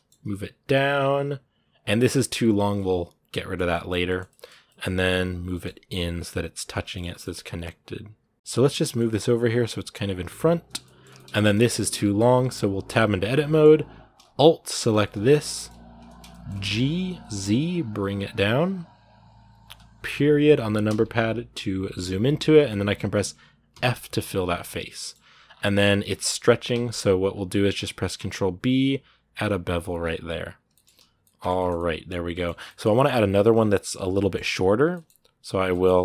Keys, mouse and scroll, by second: 2.6-4.3 middle drag, 4.3 scroll up 1, 4.5 middle click, 4.7 g, 6.6 scroll down 2, 6.7-8.5 shift+middle drag, 8.5 g, 10.6 shift+middle click, 10.8 scroll down 2, 10.9 shift+middle click, 11.3-11.7 scroll up 1, 11.7 shift+middle click, 12.0 scroll up 2, 12.7 Tab, 13.1-14.7 middle drag, 14.7 alt+right click, 14.9 alt+scroll down 2, 15.3-16.5 shift+middle drag, 16.5 g, 20.7 KP_Decimal, 23.2-23.5 scroll down 1, 23.5 f, 23.8-25.3 middle drag, 25.3 scroll down 2, 26.6-27.1 scroll up 2, 28.0 ctrl+b, 29.7-30.1 scroll down 10, 30.5 shift+middle click, 30.8 a, 30.9 scroll down 1, 31.0-32.3 middle drag, 32.3 scroll up 2, 32.4-35.3 middle drag, 35.3 right click, 35.5 scroll up 3, 35.5 shift+middle click.